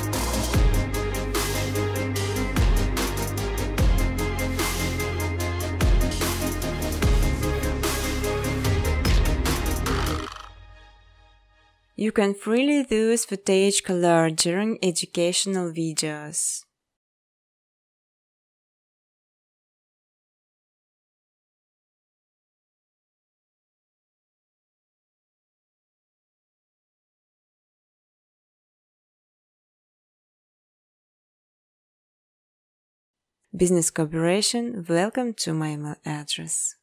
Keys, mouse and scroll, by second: 0.2-0.9 scroll, 1.7 click, 5.6 space, 6.4 space, 6.7 click, 6.9 right click, 8.7 click, 9.7 click, 10.0-11.4 typing, 12.7 click, 13.0 click, 14.3 click, 15.6 Tab, 17.1-18.3 typing, 20.2 click, 20.4 click, 20.4-21.1 typing, 23.6 click, 24.0 click, 24.5 typing, 35.0-36.8 typing.